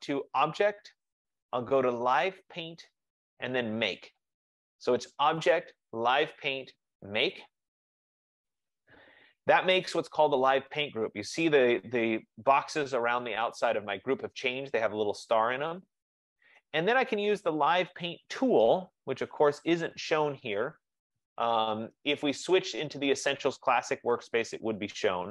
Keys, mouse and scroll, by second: 0.6 click, 7.9 click, 11.0-12.9 drag, 22.8 F15, 24.7 click.